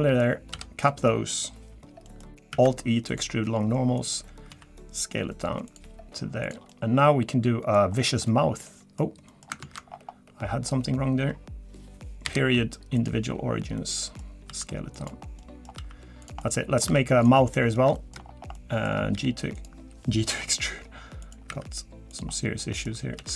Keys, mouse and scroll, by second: 0.5 f, 0.9 middle click, 1.5-2.0 scroll up 1, 2.0 middle click, 2.5 alt+e, 4.5 s, 5.8 g, 6.7 middle click, 7.9-8.3 scroll up 3, 8.3 middle click, 9.3 middle click, 9.4 scroll up 1, 9.6 ctrl+z, 9.9-10.5 scroll down 3, 10.0-10.5 scroll up 1, 10.5-11.1 scroll down 1, 12.2 ., 13.8 middle click, 14.5 s, 15.2 scroll down 1, 15.4 middle click, 15.8 s, 16.4 middle click, 16.9 3, 17.2 click, 17.5 middle click, 17.9 shift+middle click, 18.2 scroll up 3, 18.4 scroll down 1, 18.5 middle click, 19.1 g, 20.4 i, 21.5 e, 22.3 middle click, 23.2 s.